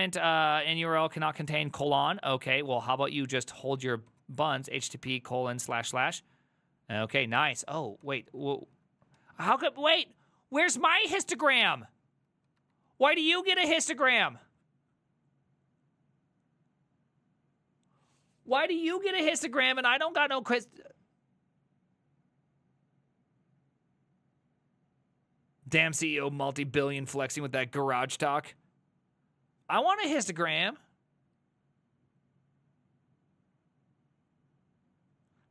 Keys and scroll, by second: 1.0 Up, 1.2 ctrl+Left, 1.4 ctrl+Left, 1.6 ctrl+Left, 1.8 ctrl+Left, 2.0 ctrl+Left, 2.1 ctrl+Left, 2.3 ctrl+Left, 2.4 ctrl+Left, 2.6 ctrl+Left, 2.7 ctrl+Left, 2.9 ctrl+Left, 3.0 ctrl+Left, 3.2 ctrl+Left, 3.3 ctrl+Left, 3.5 ctrl+Left, 3.7 ctrl+Left, 3.9-5.9 typing, 7.1 ctrl+a, 7.2-7.9 typing, 8.1 ctrl+d, 8.2 ctrl+d, 8.4 ctrl+d, 8.6 ctrl+d, 9.2 a, 12.7 alt++.